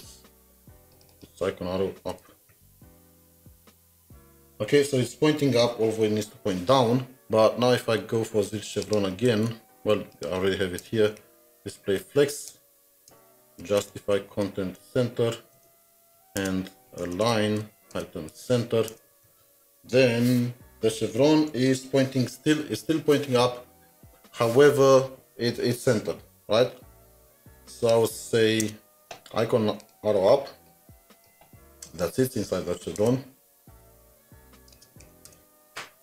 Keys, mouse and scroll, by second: 1.1 middle click, 1.3 double click, 1.8-2.7 typing, 8.8 ctrl+s, 8.8 double click, 9.3 ctrl+c, 9.3 typing, 10.8 Return, 11.2-11.8 typing, 12.5 Return, 13.1 Return, 13.5-15.5 typing, 15.5 Return, 16.1 Right, 16.4 Return, 16.7-18.4 typing, 18.9 Return, 19.2 ctrl+s, 28.6 ctrl+s, 28.7 Return, 31.4 ctrl+c, 31.4 typing, 33.0 Return, 34.0-35.0 typing, 35.3 Return.